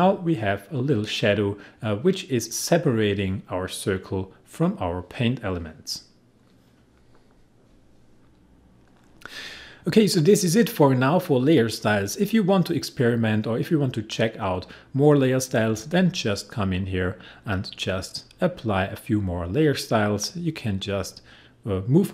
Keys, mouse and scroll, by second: 8.3 click, 16.9 right click.